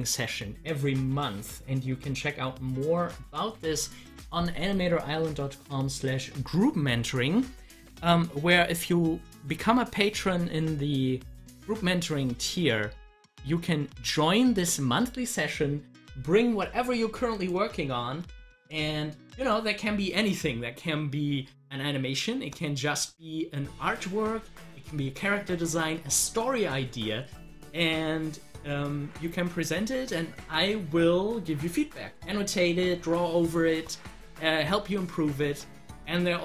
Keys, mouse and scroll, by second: 2.6 click, 17.3 click.